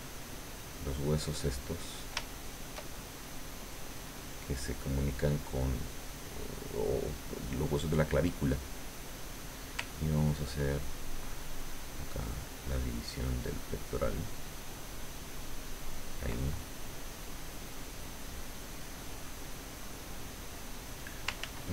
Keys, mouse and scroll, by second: 0.3-2.0 drag, 2.4 shift+middle click, 10.3-16.4 ctrl+drag, 16.4 ctrl+middle click, 17.2 middle click, 18.0 middle click, 18.7 middle click, 19.4 middle click, 21.4 ctrl+z.